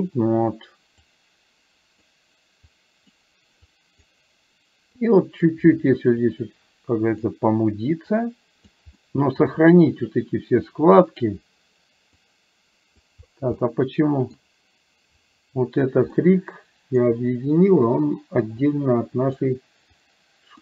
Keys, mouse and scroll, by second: 1.1-2.1 drag, 2.8 click, 3.9 click, 5.1 click, 6.3-7.3 drag, 8.1 click, 9.0 middle click, 10.8 click, 12.4 click, 13.6 middle click, 16.3 middle click, 18.8 click, 20.0 click.